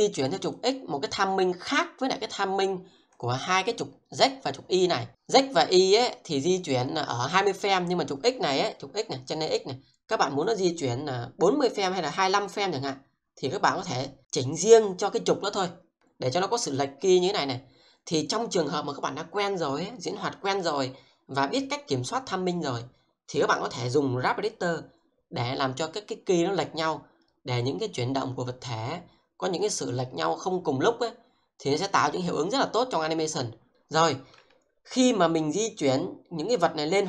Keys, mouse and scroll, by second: 0.5 click, 12.5 middle click, 16.8-18.3 drag, 35.4 middle click.